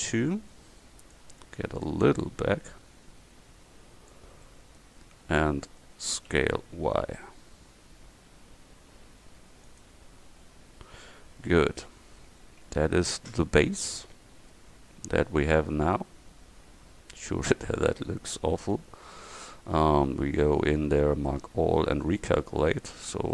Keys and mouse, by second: 1.9-4.2 drag, 4.5 middle click, 5.1 click, 6.4 s, 12.7 Tab, 18.5 Tab, 19.2 a, 19.5 a, 22.1 click, 23.0 Tab.